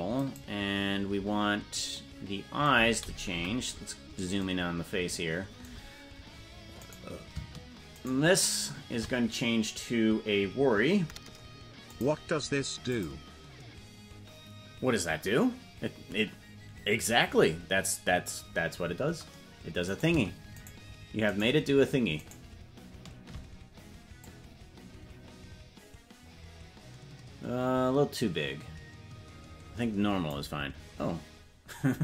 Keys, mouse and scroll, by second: 3.7 KP_Decimal, 7.4 right click, 8.6 shift+right click, 12.2 click, 13.3 click, 20.4 right click, 21.1 shift+right click, 21.9 shift+right click, 22.8 shift+right click, 24.6-30.8 drag.